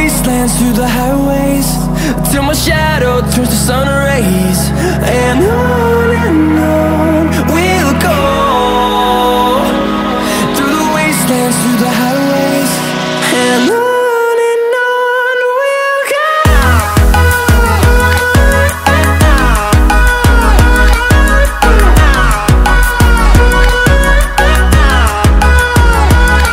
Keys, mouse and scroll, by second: 2.3 click, 7.0-8.6 typing, 9.5 click, 10.8-12.2 typing, 14.3-16.1 drag, 18.9-20.5 typing, 22.2-25.0 drag.